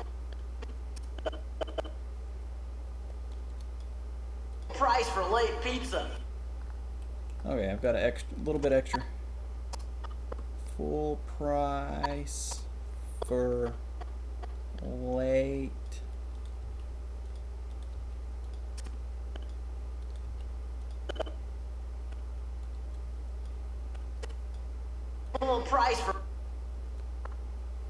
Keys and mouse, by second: 3.4 drag, 5.5 middle click, 6.9 click, 7.8 click, 8.5-9.5 drag, 15.2 click, 16.3 click, 16.6 g, 17.6 click, 17.9 g, 18.7-19.4 drag, 20.2 g, 20.7-21.1 drag, 23.4 middle click, 24.5-25.2 middle drag, 25.3 middle click, 25.9 click, 26.9-27.8 drag.